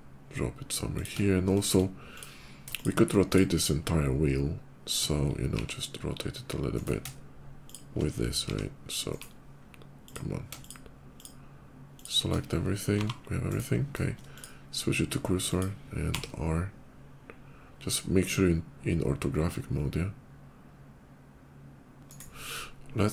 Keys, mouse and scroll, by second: 0.8 click, 1.1 shift+middle click, 1.8 shift+click, 2.5 shift+click, 3.1 shift+click, 5.4 r, 6.6 right click, 7.5 shift+click, 8.3 r, 8.8 right click, 9.8 click, 10.4 shift+click, 11.0 shift+click, 11.8 shift+click, 12.6 g, 13.3 right click, 14.2 shift+click, 15.3 shift+click, 15.9 r, 21.9 right click, 23.0 shift+click.